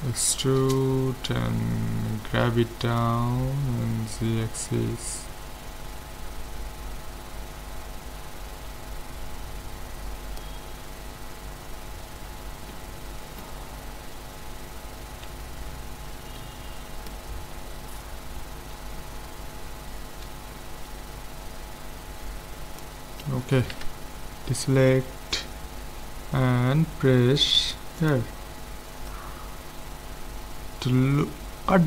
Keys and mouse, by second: 0.2 e, 3.0-4.8 drag, 10.7-12.9 middle drag, 13.5 Tab, 14.5 Tab, 15.3 z, 19.0-20.0 middle drag, 22.8-24.6 drag, 23.8 a, 28.0-29.7 drag.